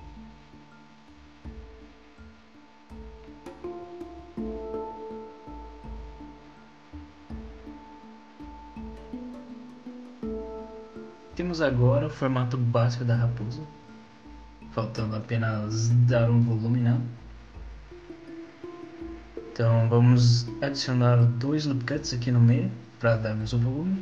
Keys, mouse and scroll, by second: 0.2 click, 0.4 click, 0.7 click, 0.9 click, 1.7 z, 1.9 click, 2.1 click, 2.3 middle click, 2.7 z, 6.7 middle click, 8.9-9.4 scroll up 2, 9.4-11.0 scroll down 3, 9.8 middle click, 11.0-11.6 scroll down 1, 11.0 z, 11.6 middle click, 12.3-12.6 scroll down 2, 12.6 middle click, 16.8-17.3 scroll up 2, 17.3-17.8 scroll down 1, 17.8 middle click, 20.1 middle click, 21.7 ctrl+r.